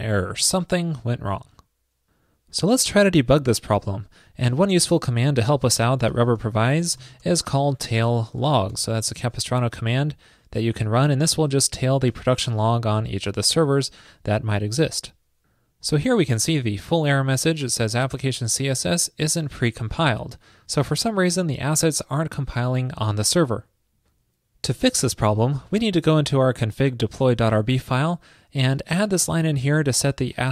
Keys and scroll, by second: 29.3 super+v.